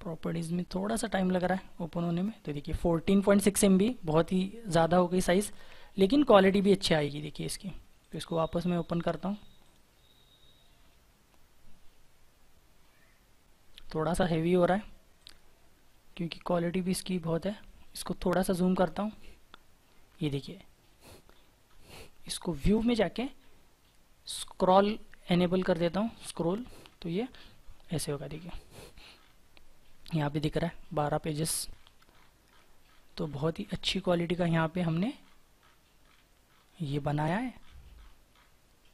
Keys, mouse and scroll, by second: 13.3-14.0 ctrl+scroll up 1, 14.0-14.5 ctrl+scroll down 2, 15.7-18.5 scroll up 1, 22.5 scroll down 1, 23.8 scroll up 1, 25.1-25.4 scroll down 1.